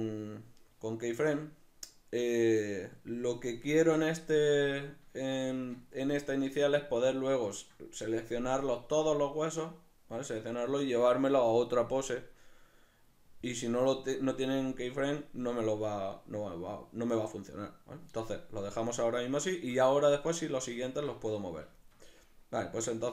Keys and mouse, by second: 4.7 ctrl+middle click, 19.5 shift+middle click.